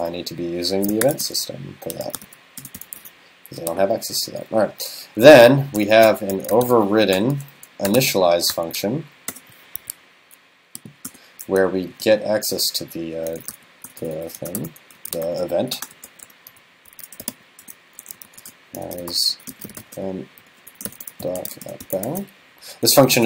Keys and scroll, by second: 3.0 super+s, 22.1 super+s.